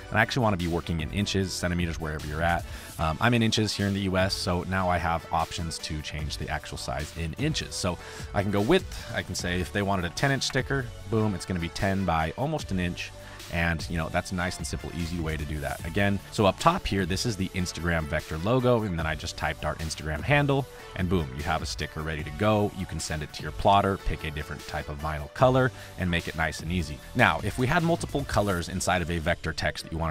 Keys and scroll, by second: 3.4 space, 10.0 KP_1, 10.1 KP_0, 10.4 Return, 15.2 space, 16.0 space, 18.0 space, 18.8 space.